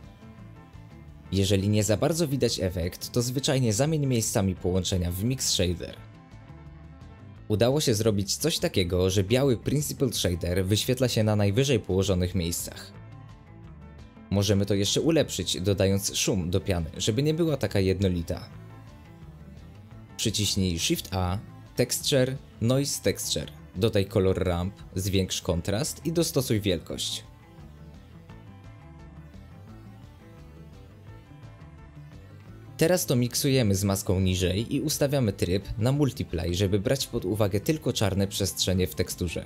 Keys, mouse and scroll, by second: 2.3-3.1 middle drag, 3.1 scroll up 1, 3.2-5.5 middle drag, 5.5 click, 7.4-11.2 middle drag, 11.2-13.7 drag, 13.7 scroll down 1, 13.9-14.2 middle drag, 14.2 scroll down 1, 14.4 space, 14.6-15.2 middle drag, 15.2 click, 18.3 g, 18.4 g, 19.4 space, 19.8 click, 27.4-27.8 middle drag, 27.8 ctrl+shift+click, 28.2-36.8 drag, 36.8-37.3 ctrl+shift+right drag, 37.3-38.8 drag.